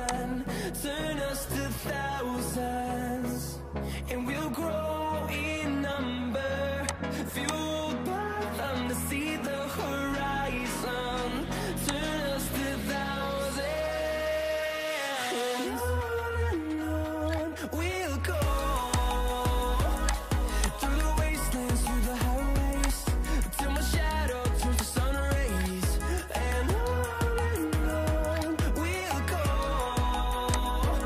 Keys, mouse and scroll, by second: 13.2 Down, 14.1 Down.